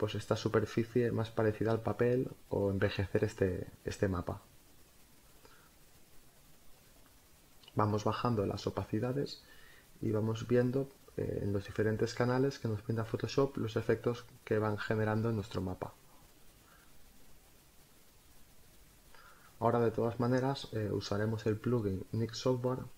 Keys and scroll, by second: 2.2 Down, 2.9 Up, 6.3 space, 8.9 Return, 10.1 Down, 13.1 Up, 13.5 Down, 13.7 Up, 17.7 space.